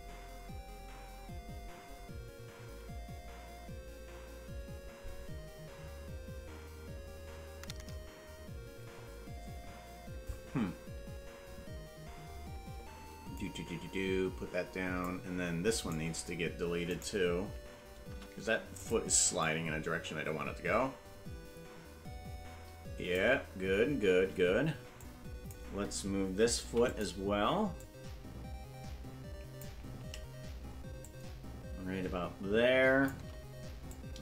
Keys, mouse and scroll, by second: 13.4-15.1 drag, 15.8 right click, 16.8 right click, 18.0 Delete, 19.4-23.2 drag, 25.0 click, 26.6 i, 27.8-29.6 drag, 31.0-33.1 shift+drag, 33.9 click.